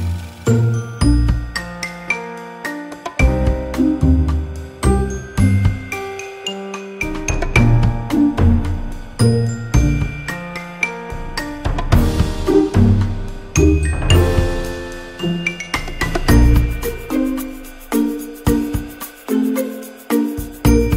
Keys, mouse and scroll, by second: 0.0-1.6 typing, 0.7 Tab, 1.0 Tab, 1.5 Tab, 2.7 r, 3.5 s, 4.6 click, 5.1 s, 5.6 f, 5.8 e, 6.5 ctrl+l, 6.7 ctrl+n, 7.1 KP_3, 7.6 s, 8.7 z, 9.0 z, 9.2 a, 9.4 Tab, 9.6 Tab, 10.1 Tab, 10.4 ctrl+l, 11.7 Tab, 12.1 KP_0, 12.5 alt+h, 12.7 a, 15.5 KP_0, 15.8 Tab, 18.5 Tab, 18.5 a, 20.3 click.